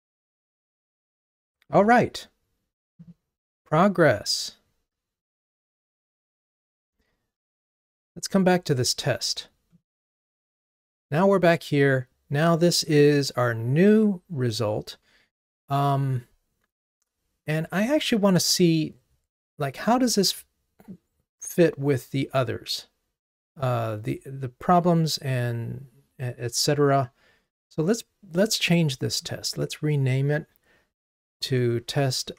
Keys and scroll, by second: 5.6 super+1.